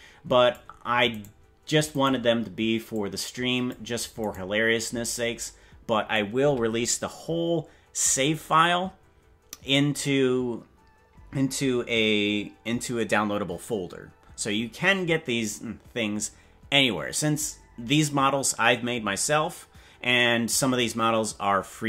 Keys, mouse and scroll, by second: 1.4 right click, 2.0 right click, 2.9 click, 4.4 right click, 5.1-6.2 drag.